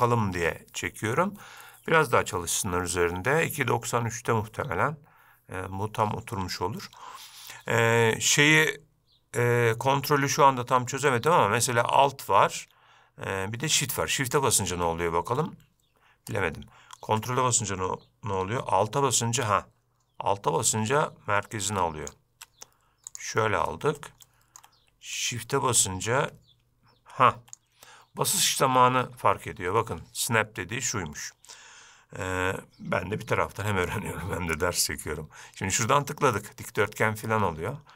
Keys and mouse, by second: 14.4-23.3 shift+drag, 24.4-24.7 shift+middle drag, 25.3-29.9 shift+drag, 35.8-37.9 drag.